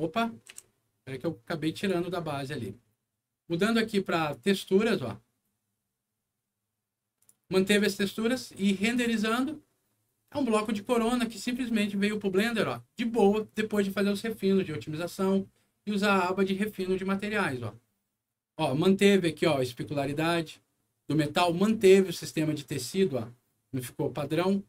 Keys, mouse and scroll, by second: 0.5 g, 1.7 click, 4.1 click, 7.1 click, 8.9 click, 11.4-12.6 middle drag, 13.1 scroll up 2, 17.6 middle click.